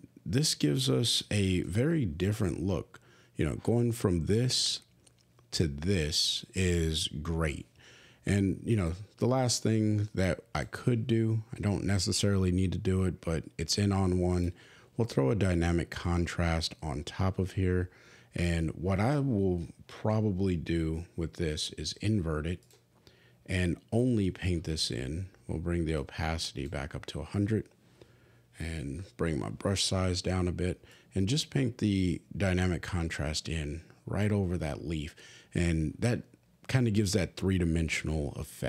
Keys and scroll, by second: 2.3 \, 5.2 \, 29.4 [.